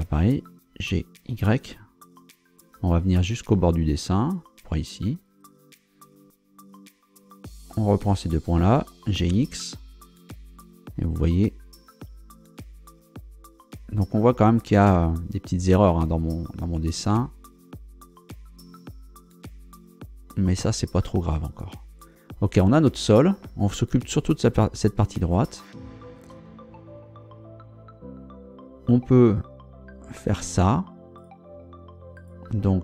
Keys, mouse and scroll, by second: 0.8 g, 1.3 y, 5.2 click, 6.5 scroll down 2, 7.3 right click, 8.1 shift+right click, 9.1 g, 9.3 x, 20.3 click, 21.4 scroll down 1, 31.2 shift+right click, 32.1 shift+right click.